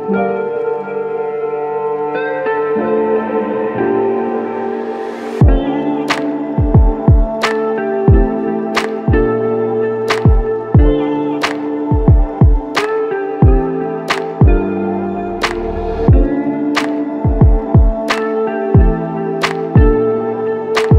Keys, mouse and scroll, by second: 2.2 double click.